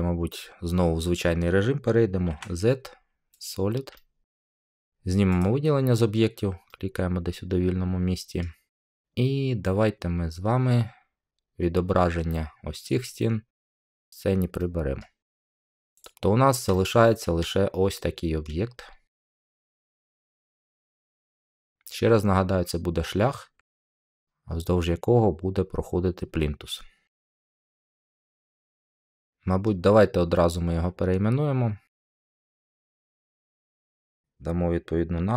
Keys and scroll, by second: 2.2 z.